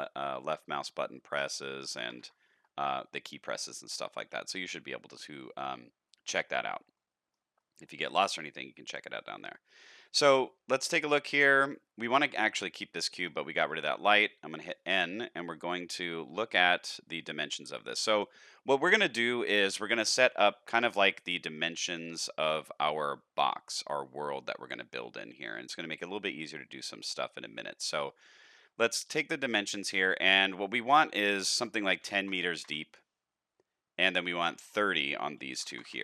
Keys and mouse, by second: 0.4-1.3 drag, 6.9 middle click, 7.5 shift+middle drag, 8.0 middle click, 9.2 middle click, 10.4-10.8 middle drag, 11.0 shift+middle click, 12.0 middle drag, 13.0 middle click, 14.6 n, 22.4 shift+middle click, 24.6-26.0 middle drag, 27.5 middle click, 31.0-33.5 drag, 34.3-36.0 drag.